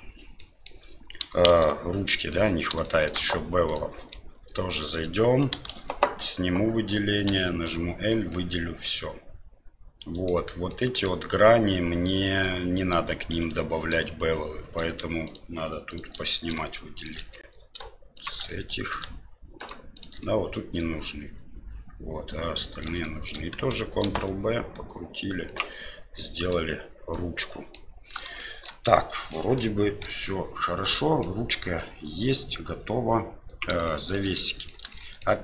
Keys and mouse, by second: 0.4-0.7 middle drag, 1.5 shift+z, 2.1 middle click, 2.8 shift+middle drag, 3.7 right click, 4.1 Tab, 5.7 alt+a, 8.4-10.3 middle drag, 10.8 middle click, 13.3 2, 15.2 shift+right click, 15.9 shift+right click, 16.1 middle click, 17.0 shift+right click, 17.3 middle click, 18.1 shift+right click, 18.4 middle click, 19.5 shift+right click, 19.9 shift+right click, 20.2-22.8 middle drag, 23.0 shift+middle click, 24.0 ctrl+b, 26.2 middle click, 27.2 middle click, 28.4 shift+middle click, 29.4 middle click, 30.1 Tab, 30.9-31.2 middle drag, 31.7-32.3 middle drag, 33.8 shift+middle drag, 34.3 middle drag, 34.9-35.2 shift+middle drag.